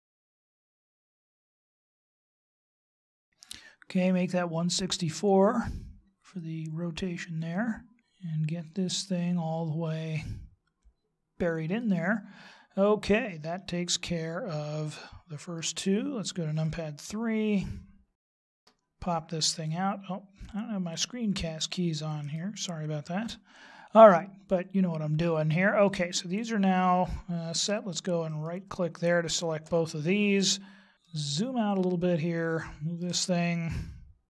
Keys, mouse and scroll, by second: 29.2 shift+right click, 30.4-30.8 scroll down 6, 31.0 shift+middle click, 34.0-34.3 scroll down 1.